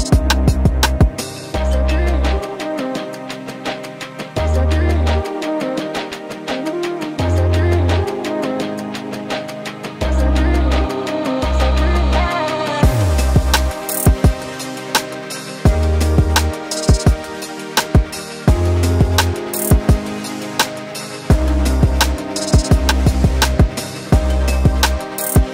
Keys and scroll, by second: 2.0 ctrl+t, 13.8 t, 16.3 v, 23.9 t, 24.6 ctrl+a, 25.3 alt+Up.